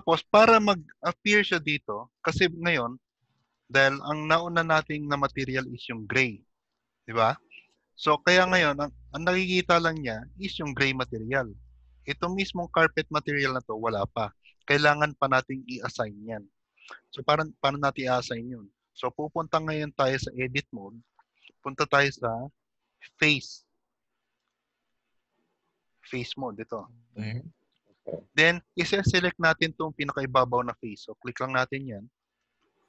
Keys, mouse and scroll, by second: 1.1 middle click, 1.1-1.7 scroll up 3, 2.1 middle click, 10.9 middle click, 12.8 click, 17.8 shift+middle click, 18.3 middle click, 20.9 click, 27.2 click, 31.5 click, 32.5 middle click.